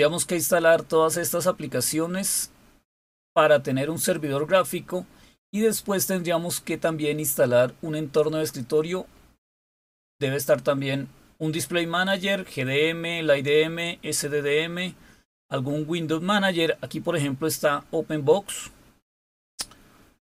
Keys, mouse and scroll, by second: 0.1-1.9 scroll up 3, 2.7-5.0 scroll down 3, 7.9-8.3 scroll down 2, 8.9-9.3 scroll down 2, 9.6-10.6 scroll down 3, 11.9-17.2 scroll down 2, 19.7-20.2 scroll down 3.